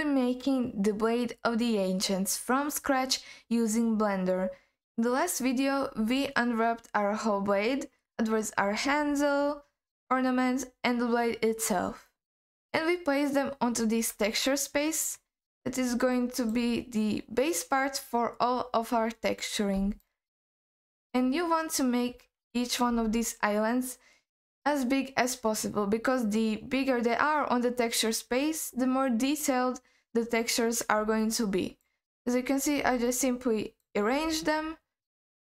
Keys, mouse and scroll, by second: 6.6-7.3 scroll down 1, 7.3 scroll up 1, 12.6 scroll up 1, 14.5 alt+middle click, 15.4-16.0 scroll up 1, 16.0 scroll up 1, 16.1 alt+middle click, 16.8-17.9 scroll up 2, 17.9-19.0 scroll down 1, 19.0-19.8 scroll down 5, 20.0 alt+middle click, 21.2-22.1 scroll up 2, 22.5 shift+middle click, 24.1-25.8 scroll down 2, 25.8-26.3 scroll up 2, 26.3-28.7 scroll down 2, 30.5-31.0 scroll down 1, 31.2 alt+middle click, 32.1-32.4 scroll up 3, 33.1 middle click, 34.3-35.3 scroll down 2, 35.3 scroll up 2.